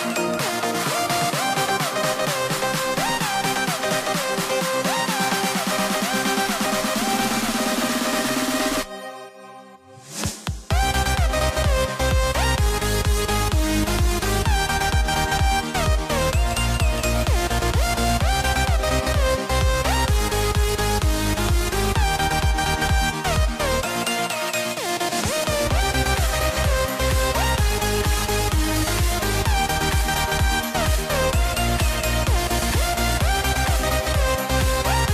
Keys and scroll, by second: 1.7 shift+m, 7.4 super+z, 9.6 shift+m, 10.6 super+z, 11.8 shift+m, 19.6 shift+m, 30.1 super+z.